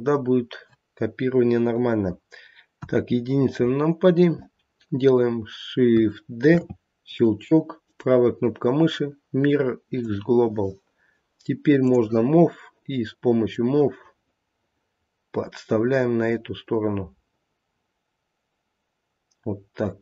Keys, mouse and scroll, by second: 2.7 KP_1, 3.7 scroll down 1, 6.5 shift+d, 7.8 right click, 11.8 click, 13.5 click.